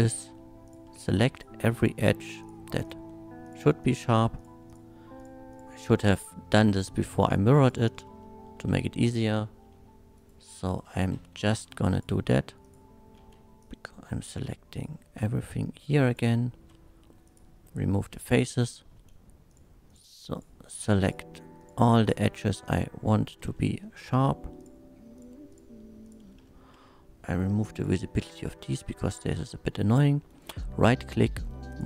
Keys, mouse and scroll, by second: 0.6 shift+click, 1.3 click, 1.8 shift+click, 2.4 shift+click, 2.8 shift+click, 3.4 shift+click, 3.8 shift+click, 4.4 shift+click, 4.7 shift+click, 5.2 shift+click, 5.5 shift+click, 6.2 shift+click, 6.7 shift+click, 7.3 shift+click, 7.6 click, 8.2 middle drag, 9.7 c, 10.2 right click, 10.8-11.3 scroll down 1, 11.3 3, 11.9 click, 12.6 click, 13.2 c, 13.6-16.1 drag, 16.1 right click, 16.6 x, 17.2 click, 17.2 x, 18.3 2, 18.6 middle click, 19.5 click, 19.9 click, 20.4 shift+click, 21.0 shift+click, 21.6 shift+click, 22.0 shift+click, 22.6 shift+click, 23.5 shift+middle click, 24.6 shift+click, 25.2 shift+click, 25.5 shift+click, 26.0 shift+click, 26.5 shift+middle click, 27.7 shift+click, 28.2 shift+middle click, 28.7 middle click, 29.4 middle click, 30.3 right click, 31.7 click.